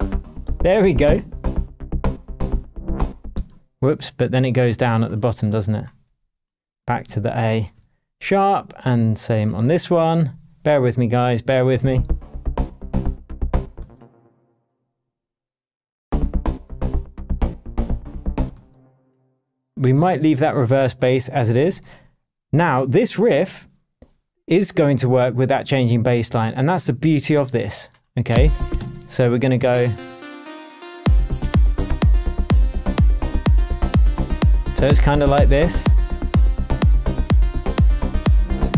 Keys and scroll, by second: 3.3 space, 6.8 Down, 7.7 shift+Down, 7.8 shift+Tab, 13.7 space, 14.7 Down, 16.8 shift+Tab, 18.5 space, 21.6 super+l, 28.3 space, 31.2 BackSpace.